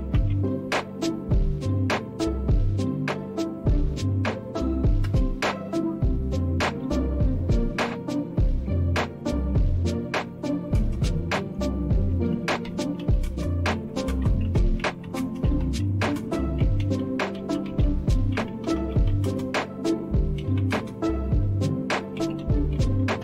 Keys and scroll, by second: 0.0-0.8 typing, 5.0 Return, 9.9-23.2 typing.